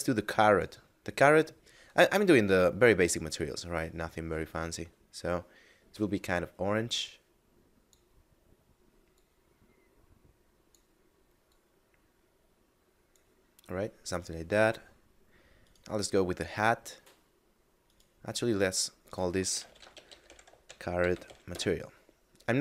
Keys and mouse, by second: 0.4 click, 9.0 click, 11.4 click, 14.8 middle click, 15.5 right click, 17.8 right click, 19.0 click, 19.4-21.1 typing, 21.4 Return.